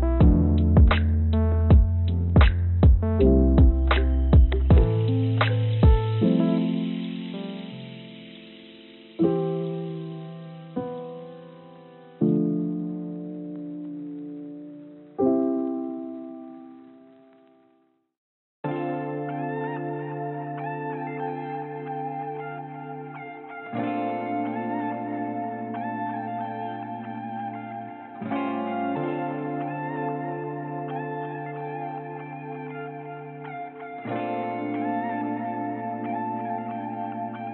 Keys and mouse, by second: 8.9-10.7 drag, 25.2-30.1 drag, 30.8 click, 31.9-34.3 drag, 35.4-37.5 drag.